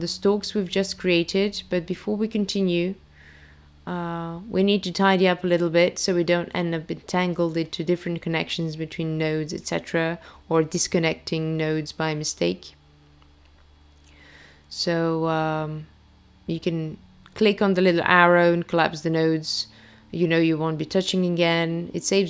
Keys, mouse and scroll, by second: 0.0-1.8 scroll down 8, 1.8 middle click, 2.6 scroll up 4, 2.9 middle click, 3.4 click, 4.3 click, 4.5 click, 4.7 click, 5.3 click, 5.5 click, 6.3 click, 6.5 click, 7.3 click, 7.5 click, 8.8 click, 9.4 click, 9.6 click, 11.0 click, 11.8 click, 12.2 click, 13.1 click, 14.0 click, 14.2 click, 14.8 click, 16.2 click, 17.7 middle click, 18.1-18.9 scroll up 5, 18.5 middle click, 20.3-20.7 scroll down 5.